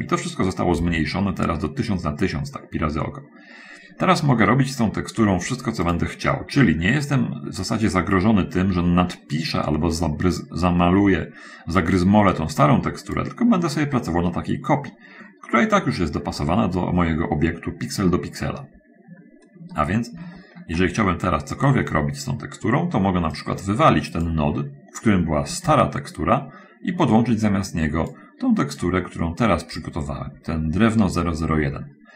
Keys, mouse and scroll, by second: 1.0 n, 2.6 middle click, 4.0-6.2 middle drag, 6.2 click, 12.9 click, 14.2 scroll up 1, 15.6-15.9 scroll up 1, 16.6 scroll up 1, 16.7-17.3 scroll down 1, 17.4-18.2 scroll down 1, 18.4-19.6 shift+middle drag, 19.6 shift+scroll down 1, 20.1 shift+middle click, 23.5-24.8 drag, 25.8 x, 27.6-28.6 drag, 29.2-30.3 drag.